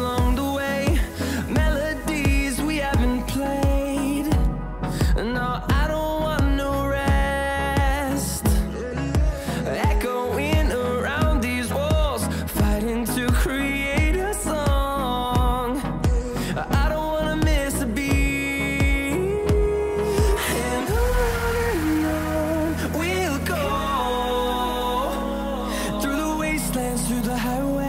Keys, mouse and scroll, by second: 8.1-12.7 drag, 13.7 click, 17.1 click, 18.4 scroll down 1, 19.6 scroll up 1, 21.7 click, 24.4 shift+click.